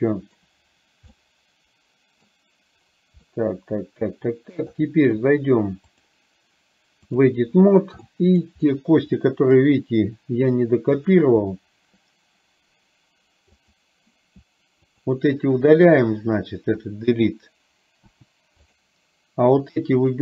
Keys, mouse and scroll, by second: 0.0-0.5 shift+middle drag, 1.1-2.4 middle drag, 3.4-4.6 middle drag, 6.1-7.5 drag, 8.1 middle click, 9.2 middle click, 11.1 click, 13.7 click, 15.0 shift+click, 15.9 shift+click.